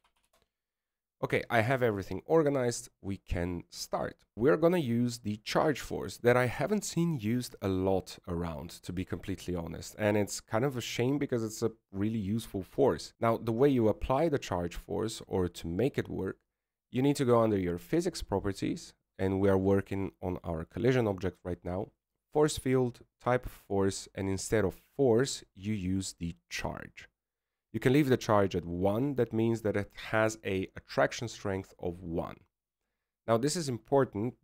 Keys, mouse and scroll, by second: 0.4 click, 0.6 click, 1.9 t, 4.3 right click, 12.1 right click, 15.1 right click.